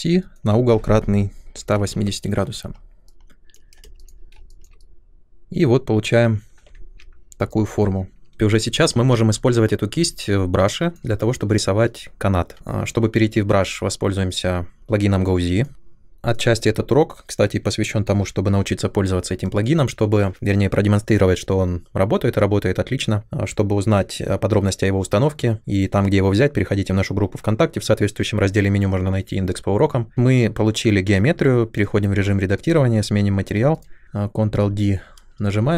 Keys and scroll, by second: 1.3-2.2 typing, 3.9 space, 6.7 ctrl+1, 34.6 ctrl+d.